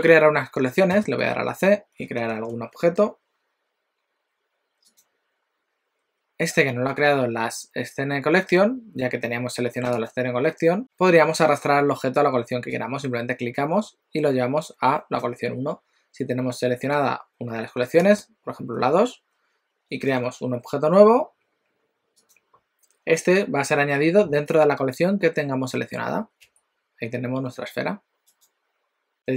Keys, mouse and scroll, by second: 0.9 c, 1.2 c, 2.3 shift+a, 10.2 click, 10.8 click, 12.8 click, 18.0 click, 20.2 shift+a, 26.5 g.